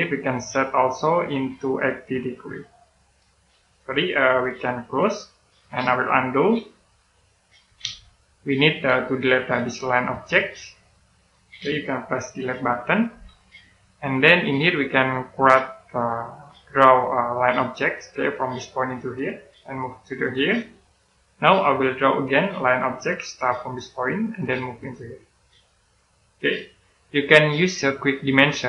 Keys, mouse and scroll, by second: 7.1 click, 7.7 z, 10.8 click, 13.0 Delete, 14.1-15.9 scroll up 1, 15.9 click, 22.2 middle click, 24.2 click, 26.3 middle click, 27.5 click.